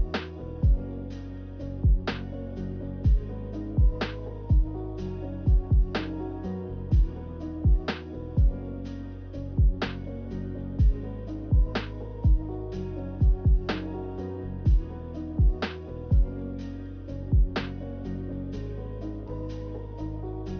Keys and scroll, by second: 0.6 z, 15.2 Delete.